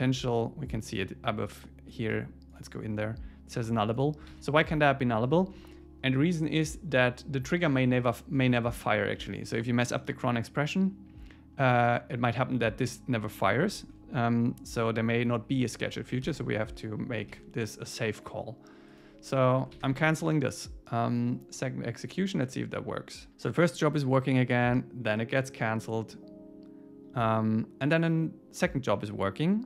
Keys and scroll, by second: 4.3 super+w, 17.4 super+s, 20.7 super+s.